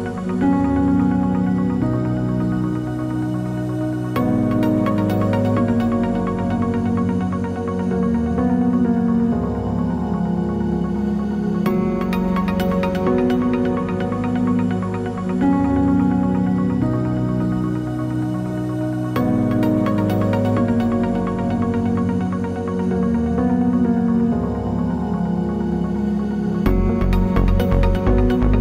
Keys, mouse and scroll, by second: 0.4 g, 9.1-9.6 scroll up 1, 9.7 ctrl+z, 10.0 shift+click, 10.3-12.7 middle drag, 11.0 g, 12.4-12.7 scroll down 2, 12.7 click, 13.2 Tab, 13.6-16.5 middle drag, 14.8 g, 16.5 click, 17.0 g, 18.7 shift+click, 19.0-20.6 middle drag, 19.9 g, 20.6 click, 20.8-22.1 middle drag, 21.9 Tab, 22.1 click, 22.2 Tab, 22.6 click, 23.8 middle click, 24.3 shift+click, 24.8-27.6 middle drag, 25.1 s, 27.6 click, 27.7 Tab, 28.0 scroll down 1, 28.3-28.6 middle drag.